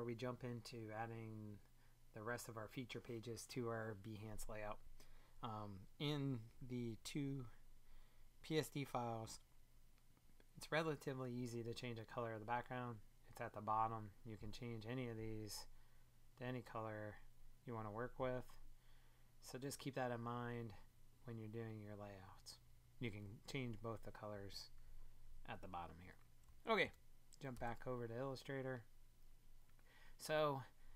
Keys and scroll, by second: 26.8 super+Tab.